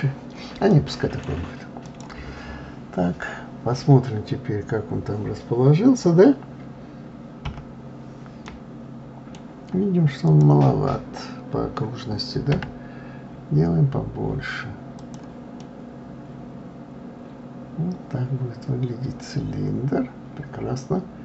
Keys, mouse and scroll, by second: 0.7-1.8 middle drag, 1.8 click, 7.5 KP_Divide, 8.4-10.3 middle drag, 10.3 click, 12.5 s, 15.6-18.6 middle drag.